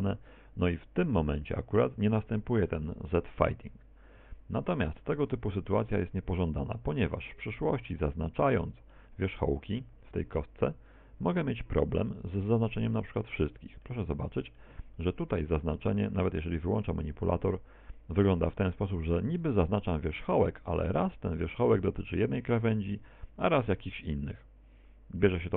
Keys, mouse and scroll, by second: 4.2 Escape, 5.2 Tab, 6.0 middle click, 7.0 middle click, 7.4 right click, 8.0 middle click, 9.4-10.0 scroll up 5, 10.9 right click, 11.4 z, 12.5 right click, 13.3 middle click, 14.4 middle click, 15.0 middle click, 17.0 click.